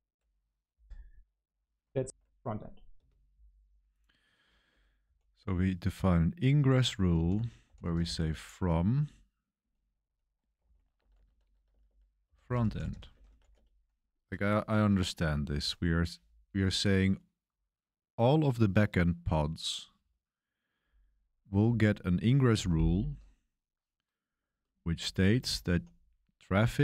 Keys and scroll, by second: 2.9 space, 4.6 ⟲, 5.0 k, 6.3-9.5 typing, 10.5-15.7 typing, 25.4-26.8 typing.